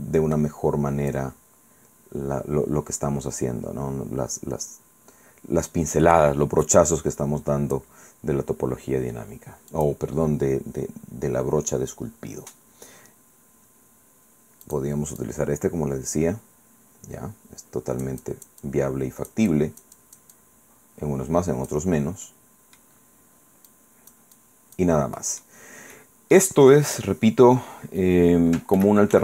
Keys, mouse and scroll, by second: 1.2-8.0 drag, 8.0 scroll down 1, 8.5-8.8 scroll up 1, 8.8 scroll down 1, 9.8 click, 14.7 click, 15.2-21.9 drag, 22.0 scroll down 2, 22.3 middle click, 23.0 scroll up 2, 23.7 click, 25.2 middle click, 25.2 scroll down 2, 25.4 scroll up 1, 25.6 scroll down 1, 26.0 middle click, 27.1-27.4 scroll down 1, 28.8 ctrl+z.